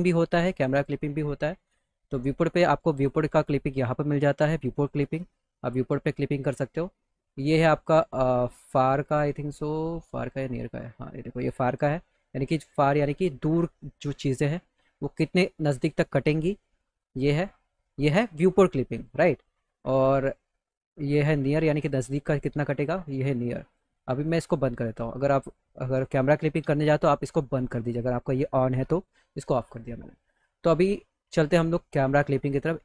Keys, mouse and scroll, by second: 0.1 right click, 0.5 right click, 2.9 right click, 4.7 right click, 7.5-8.9 drag, 9.9-10.9 drag, 15.0-17.4 drag, 19.1-20.6 drag, 21.6 click, 23.2 click, 24.4 click, 28.9 click.